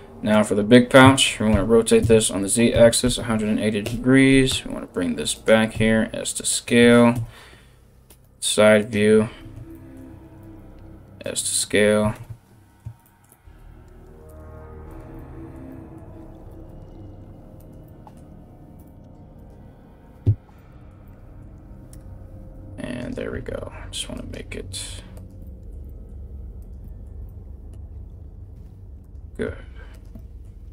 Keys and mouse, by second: 1.1 r, 4.1 g, 5.3 s, 6.7 KP_3, 7.7 g, 10.0 s, 11.7 ctrl+KP_1, 13.2 g, 14.1 s, 16.1 g, 18.4 r, 22.0 r, 22.9 r, 24.3 g, 25.9 g, 28.1 r, 29.1 g, 30.2 g.